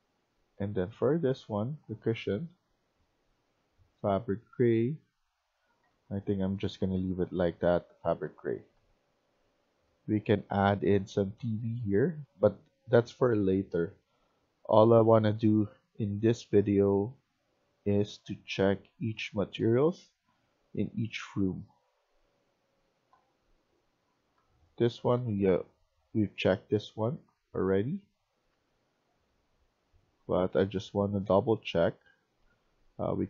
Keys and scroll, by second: 4.0 w, 5.5 Escape, 5.8 Escape, 5.9-9.7 typing, 12.2-13.0 typing, 15.8 s, 20.0-33.2 typing.